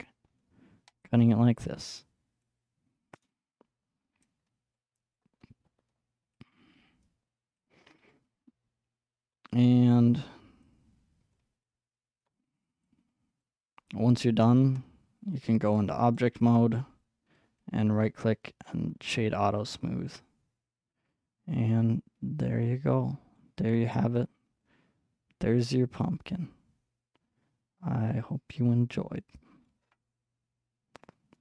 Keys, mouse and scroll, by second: 0.0-1.0 middle drag, 0.0 click, 1.0-5.2 drag, 5.2-6.7 middle drag, 6.7-9.3 drag, 9.3-10.6 middle drag, 10.6-11.6 drag, 11.6-12.8 middle drag, 12.8-15.8 drag, 15.8-17.6 middle drag, 17.6-18.7 drag, 18.7 right click, 19.6-23.7 middle drag, 23.7-24.5 scroll up 2, 24.5-25.2 scroll up 1, 25.2-26.1 scroll up 1, 26.1-26.5 scroll up 1, 29.9-31.4 middle drag.